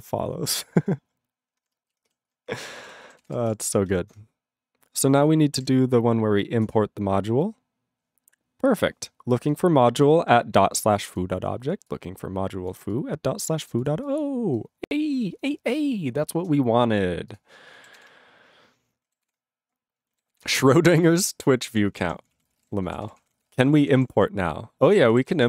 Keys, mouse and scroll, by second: 2.2 ctrl+s, 2.6 ctrl+a, 2.7 ctrl+space, 2.8 ctrl+e, 2.8 ctrl+g, 3.2 ctrl+s, 17.3 click, 17.3 click, 18.0 ctrl+s, 19.2 ctrl+s, 20.1 scroll down 1, 20.3 ctrl+s, 21.7 ctrl+p, 21.8 ctrl+p, 22.2 ctrl+p, 22.3 ctrl+a, 22.3 ctrl+p, 22.4 ctrl+space, 22.5 ctrl+e, 22.6 ctrl+g, 23.0 ctrl+s, 23.1 ctrl+p, 23.2 ctrl+a, 23.2 ctrl+p, 23.3 ctrl+space, 23.4 ctrl+e, 23.5 ctrl+g, 23.6 ctrl+p, 23.8 ctrl+p, 23.9 ctrl+e, 24.1-24.9 ctrl+p, 25.2 ctrl+s, 25.4 ctrl+a.